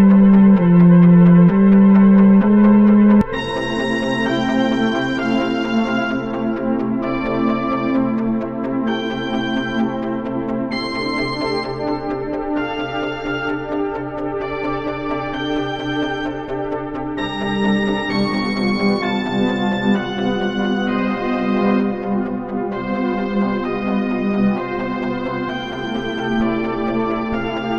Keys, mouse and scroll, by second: 0.0-1.2 drag, 4.5-5.5 drag, 5.5 click, 6.0-7.2 drag, 7.3 click, 7.6 click, 7.9-8.4 drag, 10.0-11.6 drag, 11.6 click, 20.5 click, 21.4 click, 22.7-24.9 drag, 25.0-27.2 drag, 27.3 click.